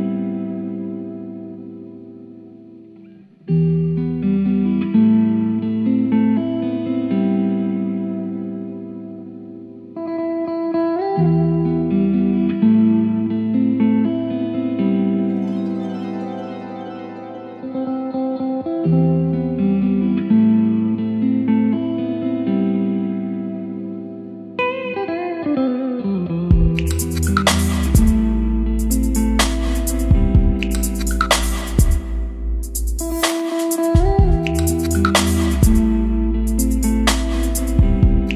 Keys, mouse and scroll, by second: 4.0 click, 4.7-6.9 right drag, 6.9-12.1 drag, 11.9-16.5 typing, 16.5 Return, 18.3-27.1 drag, 27.1 middle click, 27.6-34.3 drag, 34.3-35.5 typing, 35.6 Return, 37.1 click, 37.9 Tab, 38.2-38.3 typing.